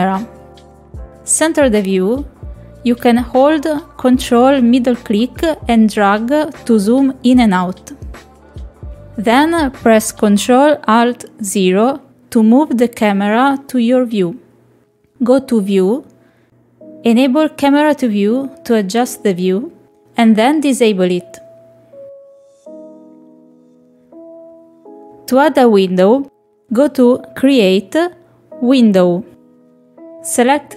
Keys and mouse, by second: 3.5-6.8 ctrl+middle drag, 14.4 click, 16.5 click, 18.1 shift+middle click, 18.8 ctrl+middle click, 19.8 shift+middle click, 20.6 ctrl+middle click, 21.4 middle click, 24.2 click, 24.9 ctrl+middle click, 25.2 shift+middle click, 29.6 click.